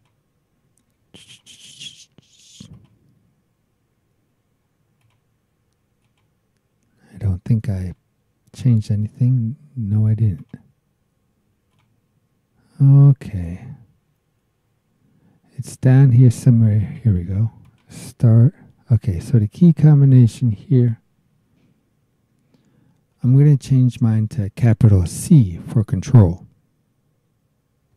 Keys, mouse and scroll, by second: 1.3 click, 2.7 click, 5.0 click, 6.0 click, 7.7 right click, 8.6 click, 10.4 click, 11.7 click, 12.5-13.1 scroll down 2, 13.3-14.3 scroll down 4, 14.6-15.0 scroll down 4, 16.8 click, 17.6 click, 20.7 click, 23.1 BackSpace.